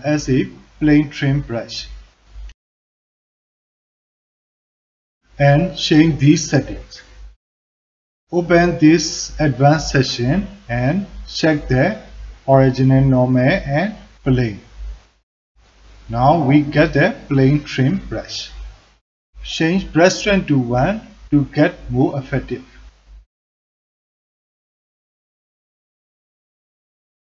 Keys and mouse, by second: 0.8-5.6 drag, 8.5 click, 9.5 middle click, 12.4 click, 13.2 click, 13.7 f, 14.4 alt+click, 14.8 shift+click, 15.4-18.8 drag, 19.7-20.4 drag, 21.6-22.7 drag, 23.0 alt+middle click, 23.5-27.2 drag.